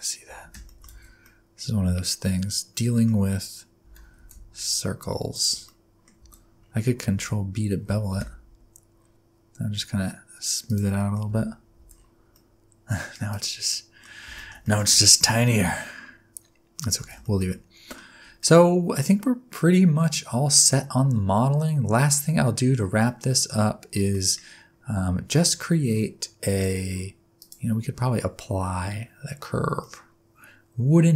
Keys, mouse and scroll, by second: 0.4 Tab, 0.6 shift+middle click, 0.9 alt+z, 1.2 middle click, 3.1-3.8 scroll up 5, 3.8 g, 5.6 middle click, 6.2 alt+z, 6.6-7.0 scroll up 3, 7.1 alt+z, 8.2 ctrl+b, 10.9 scroll down 1, 11.0 middle click, 11.4 Tab, 11.7 alt+z, 11.9-12.6 scroll down 5, 12.3 middle click, 13.3 click, 13.7 middle click, 14.0 scroll down 3, 14.3 shift+scroll up 1, 14.5 shift+middle click, 14.6 middle click, 14.9 alt+z, 15.0 middle click, 17.0 alt+z, 17.2 shift+middle click, 17.5 middle click, 18.4-18.7 scroll down 1, 18.7 middle click, 22.2-23.0 scroll down 2, 23.0 middle click, 27.4 click, 29.8 middle click.